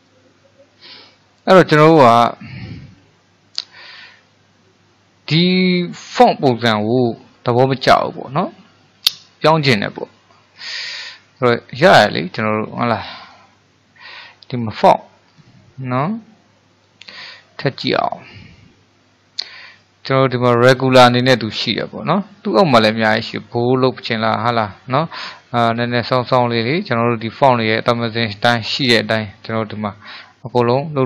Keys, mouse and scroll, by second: 0.1 click, 0.8-3.9 middle drag, 5.4-13.2 middle drag, 13.2-19.9 drag.